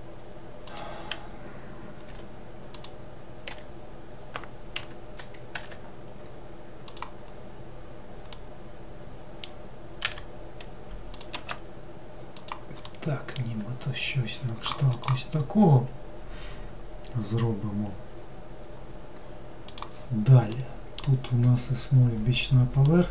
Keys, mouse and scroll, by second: 2.1 g, 3.5 r, 5.7 e, 7.3-8.4 scroll down 1, 8.4-10.1 middle drag, 10.1 e, 11.4 s, 12.9-16.1 middle drag, 20.6-21.6 middle drag, 21.6-22.9 scroll up 2, 22.9-23.1 middle drag.